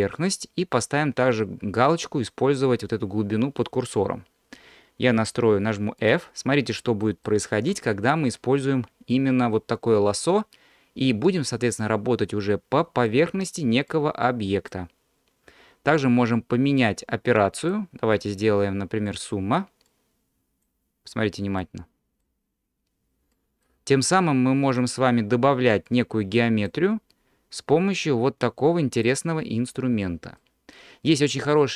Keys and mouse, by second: 2.7 click, 5.4 f, 6.5 middle click, 7.2 shift+middle click, 11.8-13.3 drag, 13.9-14.9 drag, 17.6-19.2 drag, 20.0-21.0 drag, 21.6-22.7 drag, 23.3 middle click, 24.1-25.3 drag, 25.9-27.2 drag, 28.1-29.7 drag, 30.4-31.7 middle drag.